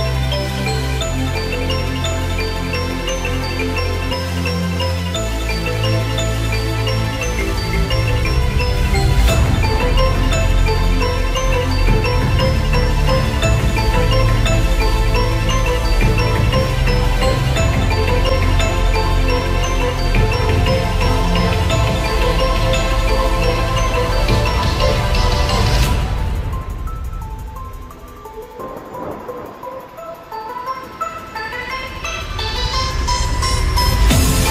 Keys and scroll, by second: 29.4 ctrl+alt+z.